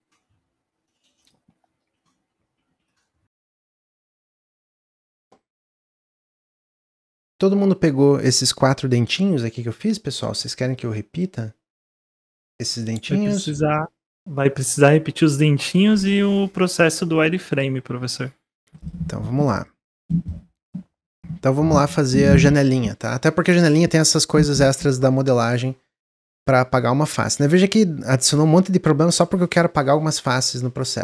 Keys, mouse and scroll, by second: 0.0-3.2 middle drag, 5.8 middle click, 6.3-6.6 scroll up 2, 6.7 click, 17.0 click, 18.1 click, 18.5 x, 19.1 click, 19.4 x, 20.1 middle click, 20.3-21.0 scroll down 1, 21.0 click, 21.5-24.7 shift+middle drag.